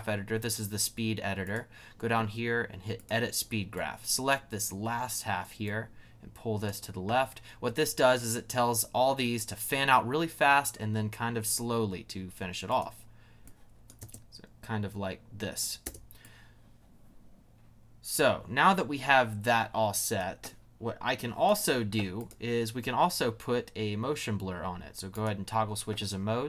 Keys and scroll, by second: 14.0 space, 15.8 space.